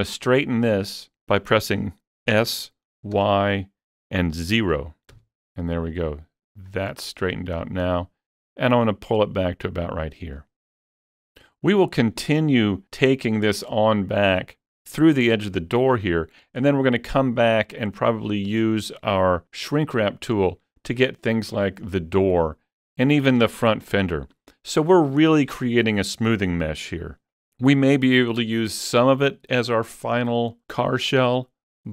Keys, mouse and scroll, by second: 2.3 click, 2.3 s, 2.3 y, 3.2 y, 5.1 0, 6.5 click, 7.6-12.6 drag.